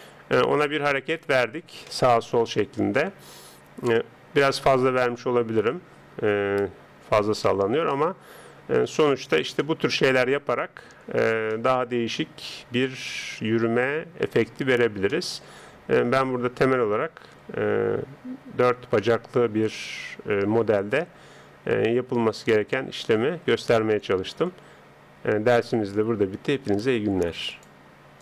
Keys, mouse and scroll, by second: 7.5-13.5 middle drag, 15.1-20.1 middle drag.